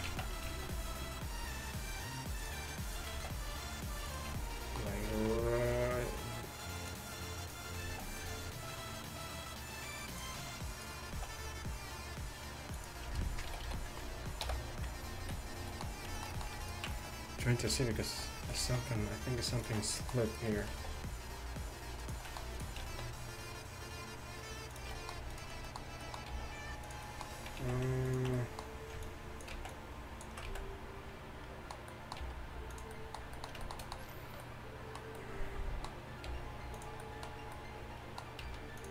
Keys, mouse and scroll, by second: 0.1 z, 0.5 alt+s, 3.2 alt+s, 5.2 alt+s, 7.9 alt+s, 11.2 alt+s, 13.5 a, 13.7 a, 14.5 ctrl+n, 15.3 a, 16.5-17.9 middle drag, 17.9 g, 19.4 alt+s, 20.5 click, 20.8 alt+s, 22.1 click, 22.6-24.5 drag, 22.9 alt+s, 25.4 click, 26.4 g, 27.6 z, 29.7 ctrl+z, 30.5 z, 32.3 g, 36.3 g, 38.5 s.